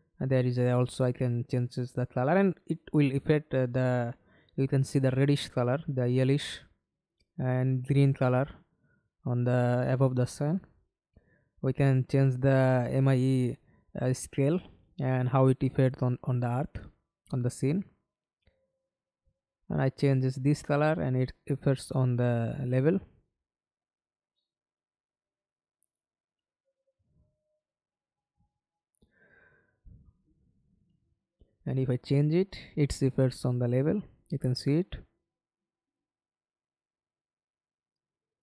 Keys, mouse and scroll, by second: 22.1 alt+click, 27.7 scroll down 1, 38.2-38.4 scroll down 1.